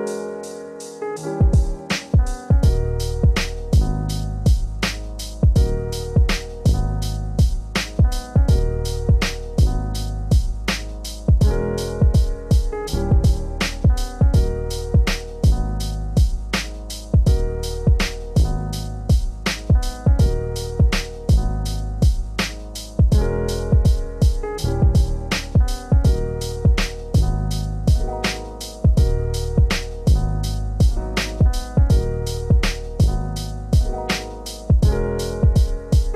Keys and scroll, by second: 8.3 shift+F6, 11.0 ctrl+BackSpace, 12.3 ctrl+d, 14.4 ctrl+g.